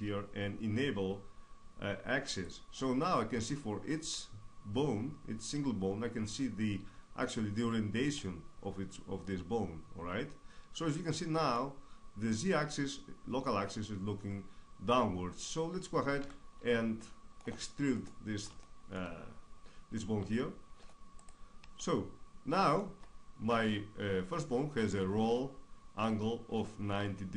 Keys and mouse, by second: 2.0-4.6 drag, 3.3 right click, 4.6 middle click, 7.9-10.1 middle drag, 10.6 middle click, 15.9 KP_3, 21.3-23.1 drag, 23.1-25.1 middle drag.